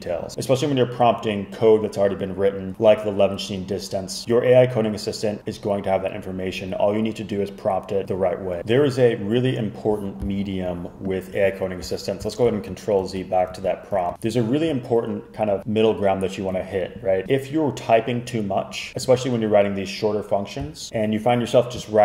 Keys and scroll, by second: 12.6 super+z, 13.1 super+z, 13.6 super+z.